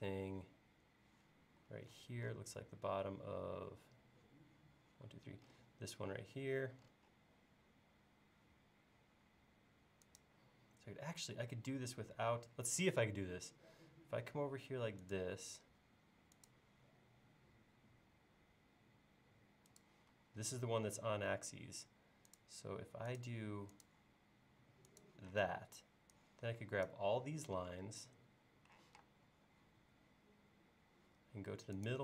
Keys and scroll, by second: 1.5 l, 20.2 l, 25.5 space, 28.8 q.